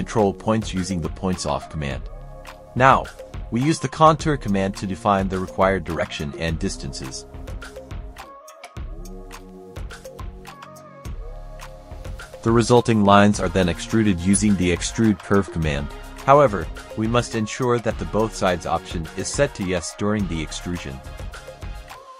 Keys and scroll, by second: 0.6 F11, 1.9-4.1 typing, 9.3 KP_3, 9.6 space, 11.3-13.9 typing, 18.8 KP_1, 19.0 KP_Decimal, 19.3 KP_5, 20.4 Return.